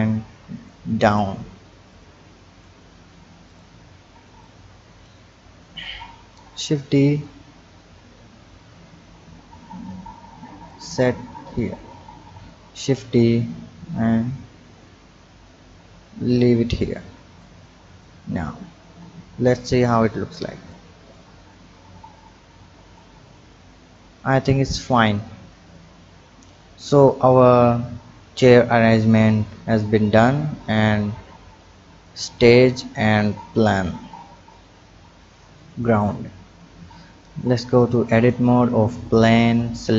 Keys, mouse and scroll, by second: 2.0 click, 2.9-3.5 scroll down 2, 3.5 click, 4.4 click, 5.4-6.3 scroll up 4, 6.3 shift+d, 11.3-12.4 scroll down 2, 12.4 shift+d, 16.6-17.4 scroll down 3, 17.4 click, 18.4-18.9 scroll down 3, 19.6 click, 20.7-22.2 drag, 23.2 click, 24.0 click, 32.3 click, 32.9-33.6 scroll down 3, 33.6 click, 34.1-34.5 scroll up 3, 35.2-36.1 drag, 36.1-36.6 scroll down 2, 36.6 Tab, 38.1-38.4 drag, 39.2 click.